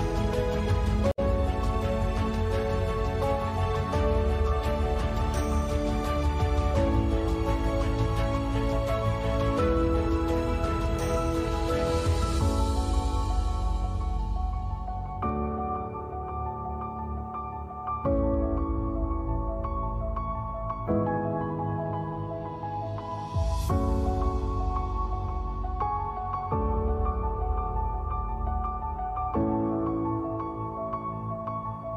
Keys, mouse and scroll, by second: 1.3 Tab, 1.7 ctrl+s, 2.2 Tab, 2.7 click, 2.9 s, 3.1 click, 3.8 i, 4.5 s, 5.4 Tab, 5.6 Tab, 5.8 ctrl+z, 6.0 ctrl+z, 6.2 Tab, 6.7 Tab, 7.6 middle click, 7.9 g, 8.5 s, 9.1 Tab, 9.9 a, 10.0 ctrl+s, 10.2 Tab, 10.7 s, 11.4 alt+s, 11.9 alt+s, 12.9 alt+s, 13.4 Tab, 13.5 ctrl+s, 17.0 Tab, 17.9 ctrl+r, 18.5 g, 19.0 s, 19.9 Tab, 20.8 Tab, 21.5 g, 22.3 s, 22.7 s, 23.4 alt+s, 24.0 s, 25.3-28.3 typing, 29.2 Tab, 30.1 Tab, 31.1 g, 31.6 Tab.